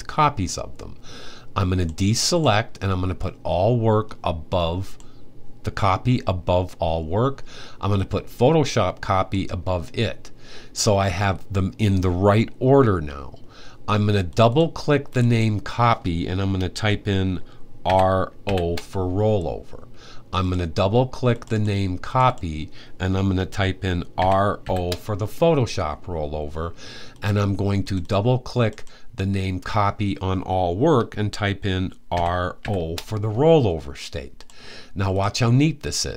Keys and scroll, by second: 17.6-18.2 typing, 23.9-24.4 typing, 31.9-32.3 typing.